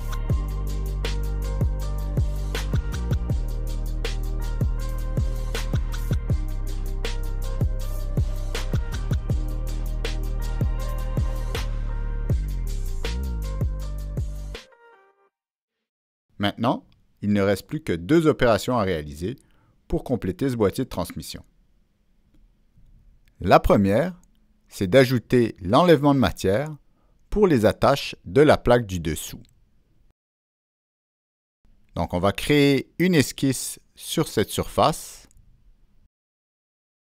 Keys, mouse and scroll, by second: 0.4 click, 2.0 middle click, 2.6 scroll up 1, 3.0 middle click, 4.2 scroll down 1, 4.7 click, 5.2 click, 5.9 click, 6.9 click, 8.7 click, 9.0 click, 9.9 Down, 9.9 click, 10.2 Return, 10.2 Down, 10.2 click, 11.2 click, 11.6 middle click, 11.9 click, 12.4 click, 13.0 middle click, 13.7 click, 14.5 click, 15.2 click, 16.3 click, 16.4-18.1 middle drag, 16.5 click, 18.8 middle click, 20.4 middle click, 21.8 click, 27.3 ctrl+middle click, 32.5 middle click.